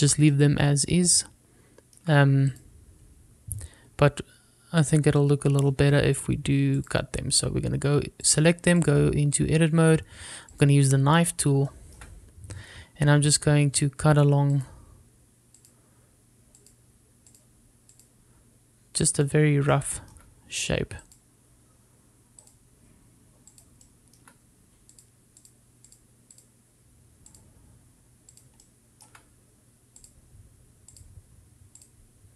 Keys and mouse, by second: 0.5 shift+middle drag, 0.9 click, 1.4-3.1 shift+middle drag, 6.3-6.8 shift+middle drag, 8.0-8.6 drag, 9.4-10.0 drag, 11.6 click, 12.8 shift+middle click, 14.9-32.3 drag, 20.9-23.2 shift+middle drag.